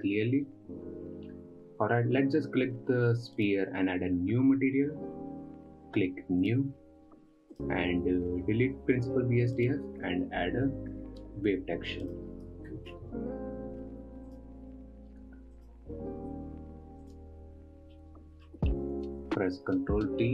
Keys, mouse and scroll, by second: 3.9 click, 6.9-8.0 drag, 10.0 click, 10.5 x, 11.6 shift+a, 17.7 ctrl+shift+click, 18.4 middle click, 19.2-20.3 scroll up 2.